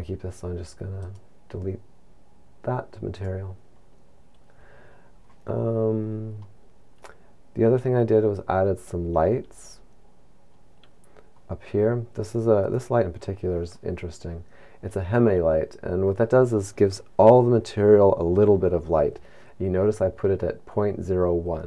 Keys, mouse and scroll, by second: 3.7 click, 6.6 middle click, 8.6 scroll down 5, 10.0-10.9 scroll up 1, 13.0 right click.